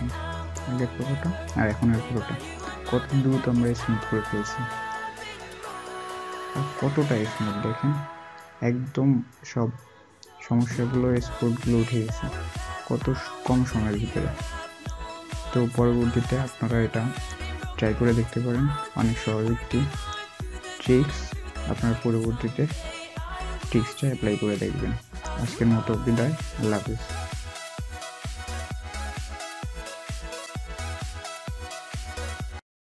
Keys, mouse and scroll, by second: 2.1 alt+scroll up 1, 2.3-3.0 alt+scroll down 1, 3.0-3.9 alt+scroll up 1, 6.4-7.2 alt+scroll up 1, 7.3-7.6 alt+scroll up 1, 8.4 alt+scroll up 1, 8.6-9.0 alt+scroll down 1, 12.6-13.3 alt+scroll up 1.